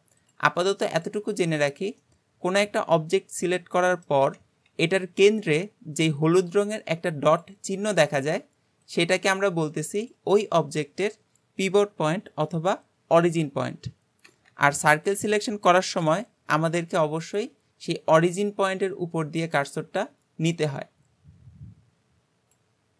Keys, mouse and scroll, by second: 0.2 click, 0.9 click, 1.3 click, 2.0-14.5 middle drag, 15.1 click, 16.0 c.